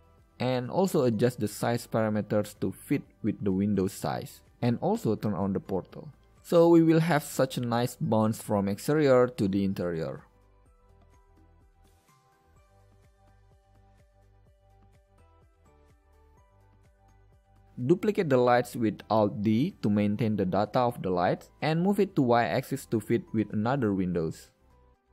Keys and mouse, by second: 20.4 alt+d, 22.9 click, 23.4 alt+d, 24.3 click, 24.9 click.